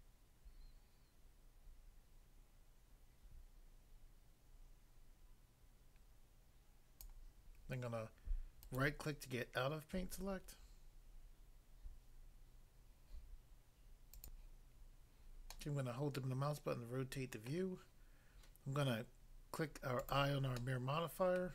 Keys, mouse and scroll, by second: 7.1 click, 8.7 right click, 8.8 right click, 14.2 click, 14.3 click, 15.5 middle click, 17.5 middle click, 20.0 click, 20.1 click, 20.5 middle click, 21.4 middle click.